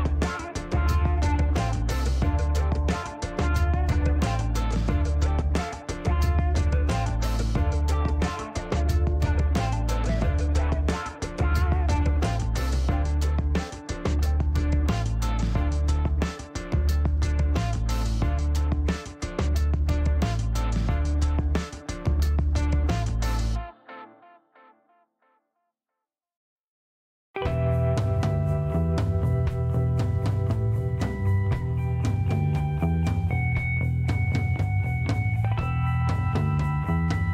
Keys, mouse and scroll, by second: 1.1 scroll down 1, 2.0 click, 3.3 shift+right click, 3.9 shift+scroll down 2, 4.3 middle click, 7.2 click, 8.5 click, 9.0 middle click, 9.3 scroll up 2, 11.0 click, 11.9 click, 16.1 click, 17.7 click, 19.5 click, 21.5-22.9 drag, 24.1 click, 25.4 7, 26.4-27.5 drag, 28.8 3, 31.6 click, 33.8 click, 35.1 shift+middle click, 35.6 shift+right click.